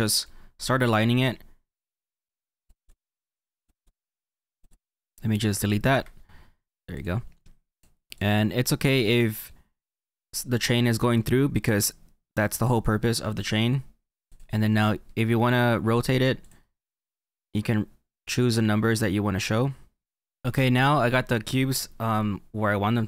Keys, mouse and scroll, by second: 2.4 click, 2.9 click, 2.9 middle click, 3.6 click, 4.8 click, 4.8-5.9 middle drag, 5.9 Delete, 7.0-9.0 drag, 9.0-14.2 middle drag, 14.3 click, 17.8 click.